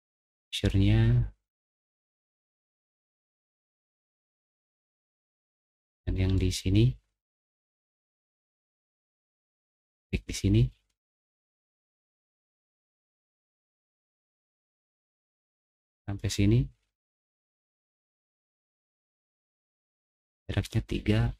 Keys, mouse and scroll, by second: 0.1 middle click, 0.5 scroll up 1, 0.7-2.8 middle drag, 4.4 middle click, 5.6 click, 6.3-7.4 middle drag, 7.8 click, 10.7 scroll down 2, 10.9-13.3 middle drag, 13.7 scroll down 1, 13.9 middle click, 14.1 middle click, 14.6 middle click, 15.2 middle click, 16.3 middle click, 16.9 middle click, 18.5 click.